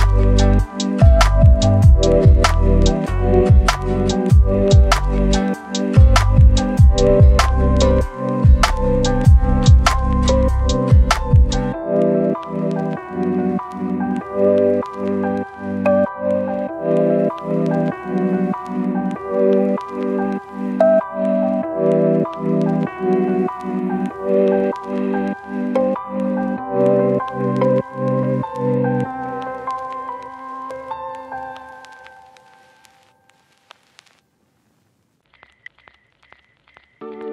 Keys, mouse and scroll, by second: 0.0 right click, 0.3 scroll up 1, 0.5-1.7 right drag, 1.7-2.1 scroll up 1, 2.1 click, 4.8 right click, 6.1 click, 7.3-7.9 scroll down 2, 7.4 right click, 7.9 right click, 8.5 scroll down 1, 8.6-9.4 scroll up 1, 9.4 click, 10.0 scroll up 1, 10.2 click, 12.3 right click, 12.7 click, 12.8-13.4 scroll down 2, 13.1 click, 13.4 scroll up 1, 13.7 click, 15.5-16.4 scroll up 2, 15.7 right click, 16.4 click, 16.6 scroll down 1, 16.7 scroll up 1, 17.0 click, 18.7 right click, 19.0 scroll down 1, 19.1-19.7 scroll up 1, 19.7 click, 20.3 right click, 20.8-21.6 scroll down 1, 21.8 right click, 22.1 scroll up 1, 22.4 click, 22.8-23.6 scroll up 1, 24.5 click, 24.8 right click, 25.5 scroll up 1, 25.6 click, 25.7 right click, 26.2 click, 26.8 right click, 27.1-27.7 scroll up 1, 27.7 click, 28.3 right click, 28.7 scroll down 1, 28.8 scroll up 1, 29.3-31.0 drag, 31.0 right click, 31.5 click, 32.0-36.3 right drag, 36.4 scroll up 1, 36.6 click.